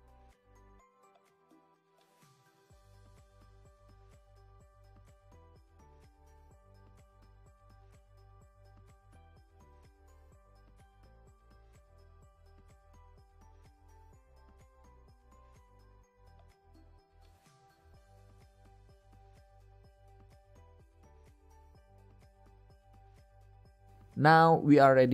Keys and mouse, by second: 0.6 alt+d, 2.0 click, 3.2 click, 4.0 KP_7, 5.0-7.2 middle drag, 10.2-11.7 middle drag, 13.1-13.5 middle drag, 13.6 middle click, 14.4 KP_0, 15.3 z, 18.1 a, 22.6-24.2 drag.